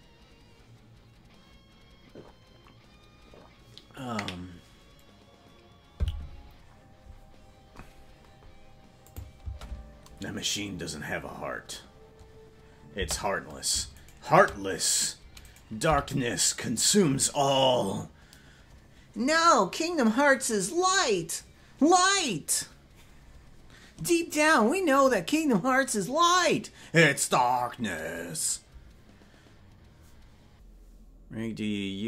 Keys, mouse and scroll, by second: 9.0 click, 10.2 space, 13.0 space, 14.1 shift+right click, 15.4 right click, 15.8 g.